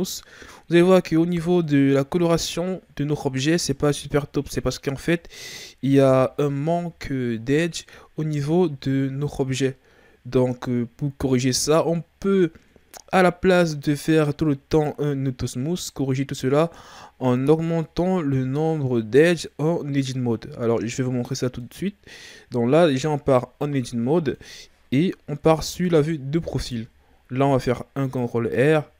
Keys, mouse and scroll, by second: 0.6-1.1 scroll down 1, 1.1-1.6 ctrl+scroll up 2, 1.6-6.0 middle drag, 6.0 KP_3, 8.0-8.6 scroll up 1, 8.6-9.2 ctrl+scroll down 5, 9.2-14.7 middle drag, 14.7 click, 17.8-22.7 middle drag, 22.7 Tab, 23.6-25.3 middle drag, 25.3 KP_3, 27.4 ctrl+r.